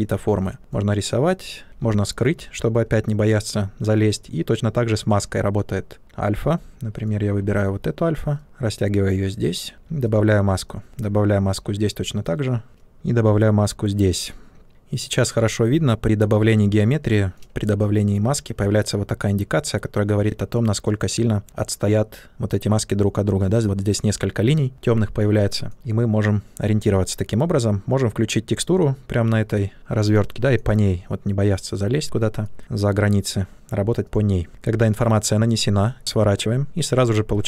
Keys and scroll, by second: 1.6 ctrl+z, 8.4 ctrl+space, 13.2 ctrl+space.